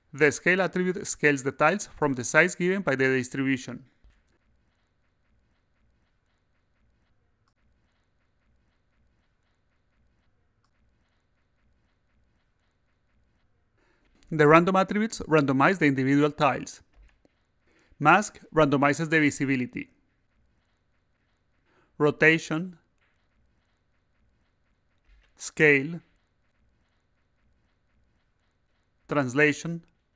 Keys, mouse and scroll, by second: 1.2 click, 4.3 click, 5.2 click, 6.8 click, 10.4 click, 18.2-21.1 drag, 21.4-24.6 drag, 25.4-28.6 drag, 29.2-30.1 drag.